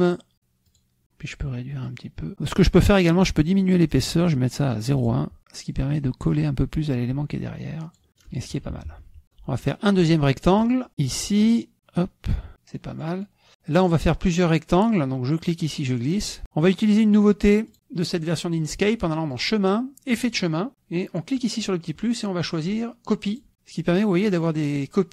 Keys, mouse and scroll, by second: 0.7 click, 1.9 click, 4.0 right click, 5.1 drag, 5.8 click, 8.1 middle click, 8.6 KP_Subtract, 9.2 middle click, 9.7 middle click, 10.9 click, 11.7 click, 12.8 click, 15.3-16.6 drag, 19.4 click, 20.3 click, 21.6 click, 23.3 click.